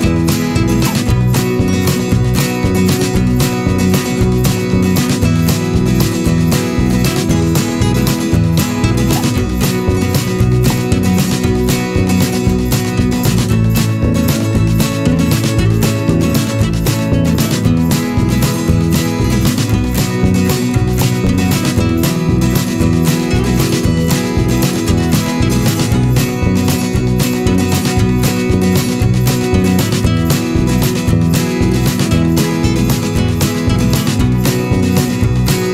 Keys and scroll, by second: 5.7 a, 9.0 p, 9.6 ctrl+z, 12.5 v, 13.5 a, 15.6 v, 16.4 Delete, 18.0 typing, 19.3 v, 20.7 a, 28.3 v, 28.6 p, 31.4 ctrl+z.